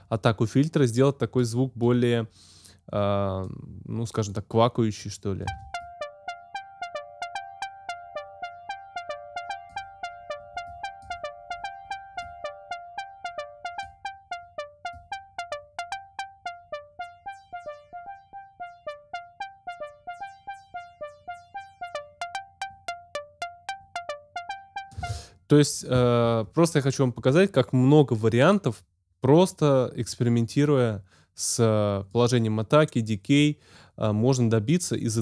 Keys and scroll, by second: 5.4 space, 25.0 space.